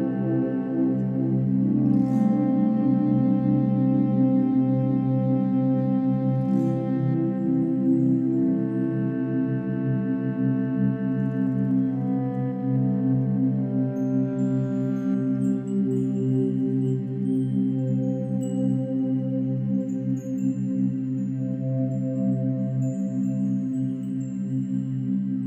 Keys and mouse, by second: 0.0-6.2 drag, 6.5 click, 7.7 1, 8.9 g, 10.1-16.5 drag, 14.6 typing, 16.6-17.0 typing, 22.3 shift+click, 23.4 click, 24.5 typing.